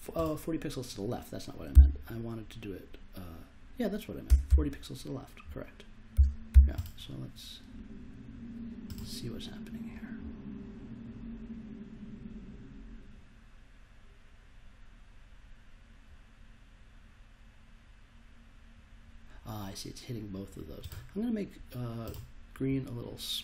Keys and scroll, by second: 1.7 0, 4.2 BackSpace, 4.4 -, 6.1 4, 6.5 0.